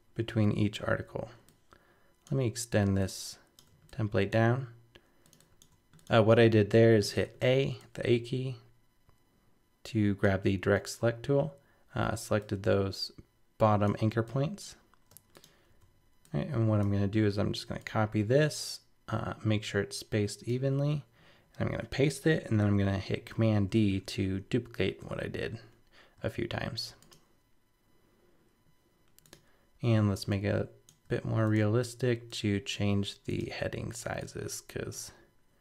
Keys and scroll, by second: 23.2 super+d, 24.2 super+-, 26.2 super+d.